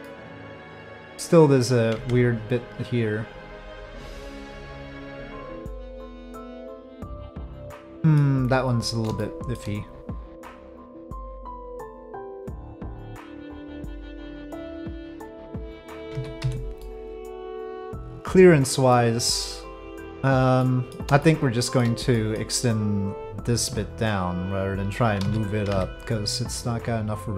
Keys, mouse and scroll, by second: 0.0 click, 1.9 Tab, 4.8 click, 6.1 click, 6.6-8.2 middle drag, 9.2 shift+middle click, 13.5 click, 14.5 click, 15.2 middle click, 16.1 z, 16.8 middle click, 18.9-20.2 middle drag, 20.6 middle click, 21.2-21.8 shift+middle drag, 22.1 middle click, 23.6 Tab, 25.3 alt+a, 25.7 c.